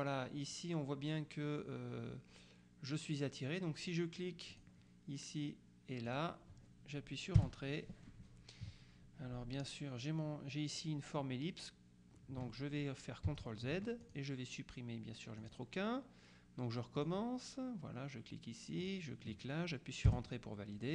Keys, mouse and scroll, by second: 4.6 click, 6.1 click, 7.5 Return, 13.3 ctrl+z, 14.1 ctrl+click, 15.5 click, 17.1 click, 18.9 click, 20.1 Return.